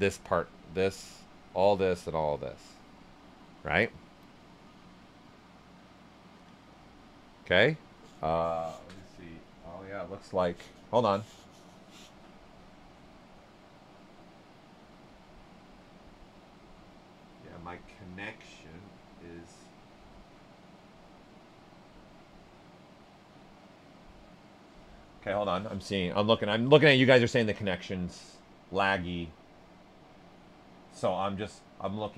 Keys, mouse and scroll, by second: 6.8-12.7 ctrl+alt+right drag, 9.1 typing, 28.7-32.1 right drag, 28.7 typing.